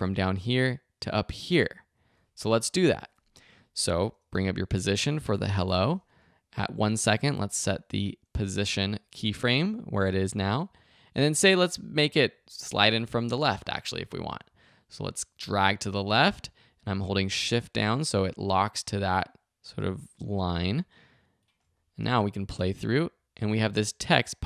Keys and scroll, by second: 1.9 super+z, 4.3 p, 22.1 shift+v, 22.5 space.